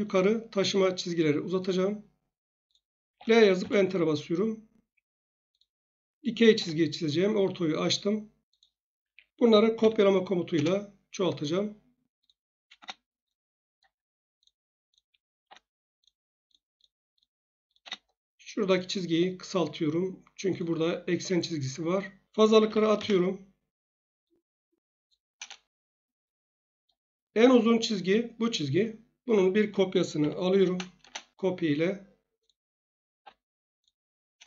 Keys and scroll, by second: 3.1 1, 3.6 Return, 6.5 F8, 9.0 Escape, 9.3-10.2 typing, 10.5 Return, 12.7 space, 15.4 F8, 17.7 space, 21.1 Escape, 22.6-23.0 typing, 23.0 Return, 25.4 Return, 30.0-31.0 typing, 33.2 F8, 34.3 Return.